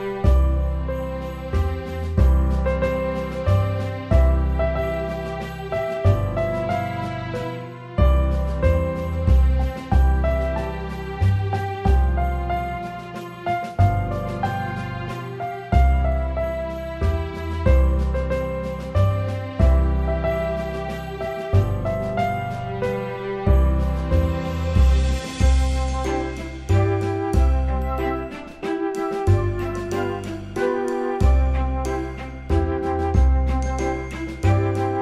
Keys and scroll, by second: 14.3 ctrl+alt+shift+e.